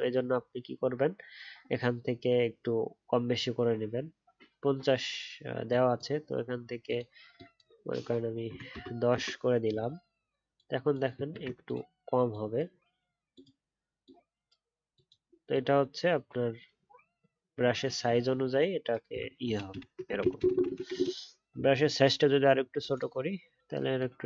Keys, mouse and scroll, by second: 11.3 ctrl+z, 19.4 ctrl+z, 20.2 ctrl+z, 20.3-20.9 ctrl+z.